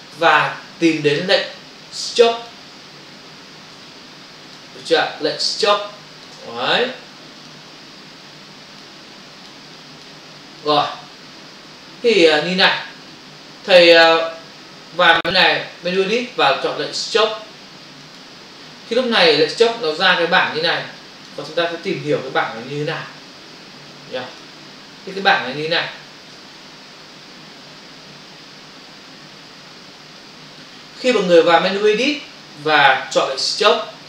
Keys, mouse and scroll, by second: 0.0 space, 3.7 click, 4.9 ctrl+alt+z, 5.7 click, 7.4 click, 8.5 click, 9.3 click, 9.8 click, 10.7 click, 11.7 f, 14.0 click, 16.0 click, 18.1 click, 20.8 click, 22.3 Print, 24.4 click, 25.1 click, 25.2 double click, 26.8 ctrl+o, 27.5 typing, 29.7 space, 30.2 ctrl+click, 32.5 click.